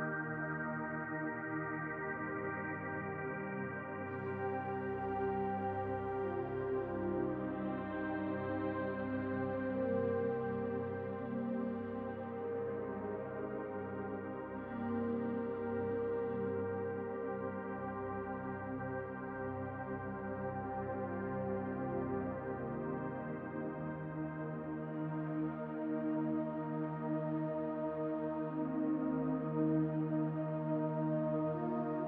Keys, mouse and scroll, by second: 3.6 click, 5.3-6.4 scroll up 1, 6.4 Tab, 8.0 click, 9.5 Delete, 13.8-17.3 scroll up 1, 19.0 click, 23.9 click, 24.8 alt+shift+click, 27.5 alt+shift+click, 29.2 alt+shift+click, 31.0 alt+shift+click.